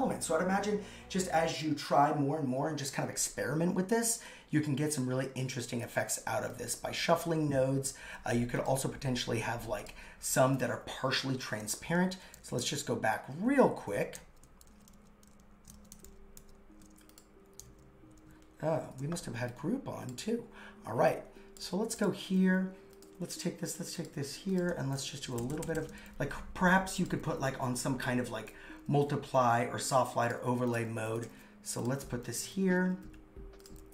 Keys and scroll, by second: 11.8 super+z, 12.1 super+z, 14.2 shift+super+z, 14.7 super+z, 15.8 shift+super+z, 16.5 shift+super+z, 17.7 super+z, 18.8 shift+super+g, 20.2 super+x, 21.8 super+x, 25.3 shift+Down.